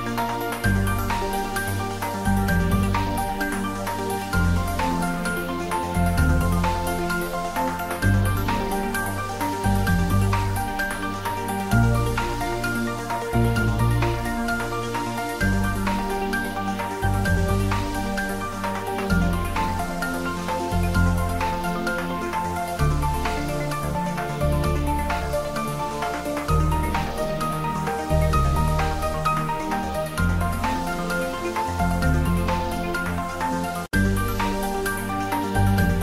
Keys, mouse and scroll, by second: 1.2 g, 1.8 click, 2.0 ctrl+z, 2.6 click, 3.2 shift+z, 3.6 click, 3.8 right click, 4.5 click, 4.8 ctrl+z, 5.1 click, 6.6 g, 7.8-8.6 typing, 12.9 click, 13.1 ctrl+z, 13.6 middle click, 14.2 shift+z, 14.4 middle click, 14.8 Tab, 15.2 ctrl+middle click, 15.5 Tab, 15.8-17.2 ctrl+middle drag, 17.2 3, 17.9 click, 19.0 ctrl+middle click, 19.7 middle click, 20.2 e, 24.3 click, 25.5 shift+middle click, 26.0 Tab, 26.8 1, 27.2 click, 27.7 shift+z, 28.2 shift+z, 28.6 click, 29.3 g, 34.2 click, 35.2 g.